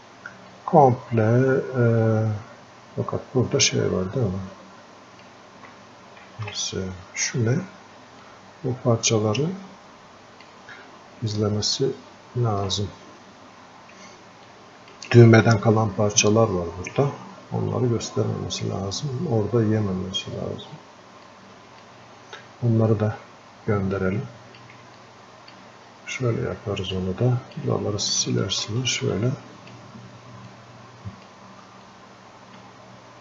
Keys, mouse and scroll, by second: 0.4 click, 0.5-6.2 ctrl+shift+drag, 6.2 ctrl+z, 7.0 scroll up 1, 7.2 scroll down 1, 8.2-12.9 drag, 13.0-13.4 scroll up 1, 14.5-16.7 alt+drag, 16.7 scroll up 1, 17.4 scroll down 1, 20.0 scroll up 1, 21.3-24.0 alt+drag, 24.0 click, 25.3 alt+click, 26.0-26.8 scroll up 2, 26.8 scroll up 1, 27.3 alt+click, 28.6-29.9 ctrl+alt+shift+drag, 30.8 ctrl+alt+shift+click.